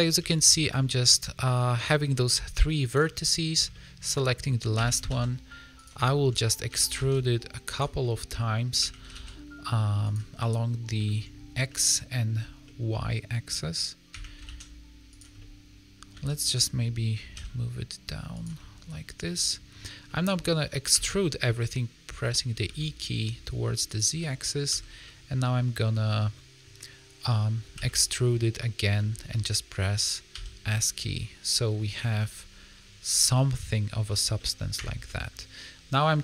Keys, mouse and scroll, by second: 0.1 a, 0.5 shift+middle click, 0.7 scroll up 3, 0.9 middle click, 2.8 click, 3.2 middle click, 3.7 shift+middle click, 4.7 e, 6.0 shift+middle click, 6.6 e, 7.9 middle click, 8.7 e, 10.3 middle click, 11.0 shift+middle click, 11.4 scroll down 2, 11.6 middle click, 12.6 middle click, 12.8 shift+middle click, 14.0 e, 15.3 middle click, 16.1 a, 17.3 g, 18.5 middle click, 19.4 middle click, 19.6 scroll up 2, 20.0 middle click, 20.9 e, 24.1 middle click, 24.6 a, 25.0 middle click, 25.9 middle click, 27.7 e, 29.2 scroll down 1, 30.3 s, 32.1 middle click, 33.4 middle click, 34.3 middle click, 34.7 Tab, 35.0 middle click.